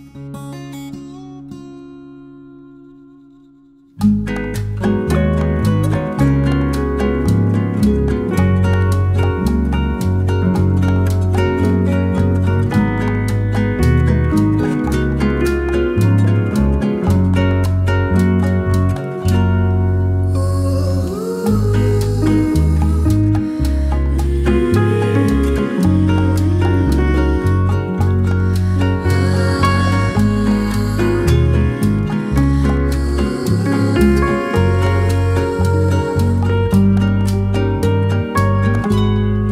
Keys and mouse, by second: 5.3 shift+middle drag, 6.0 shift+middle drag, 6.6 shift+middle click, 7.5 k, 17.0 shift+middle click, 17.7 shift+middle click, 18.5 shift+middle click, 19.2-19.6 shift+middle drag, 19.7-20.0 shift+middle drag, 20.5 shift+middle click, 22.5 shift+middle click, 25.1 k, 34.9 shift+middle click, 35.5 shift+middle click, 36.4 k.